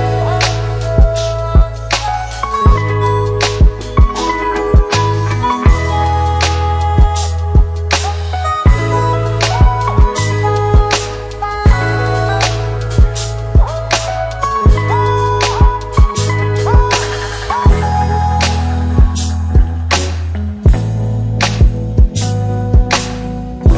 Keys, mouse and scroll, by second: 2.2 click, 9.1 Left, 10.2-12.4 click, 15.5-16.9 scroll down 1, 17.4 click.